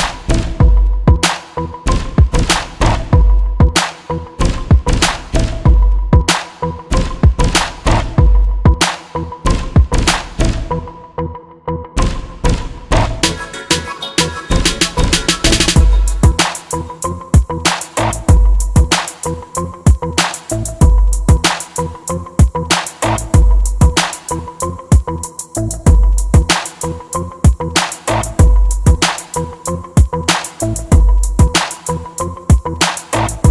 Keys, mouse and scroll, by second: 0.3 alt+a, 25.2 alt+a, 28.9-30.7 drag, 32.8-33.5 drag.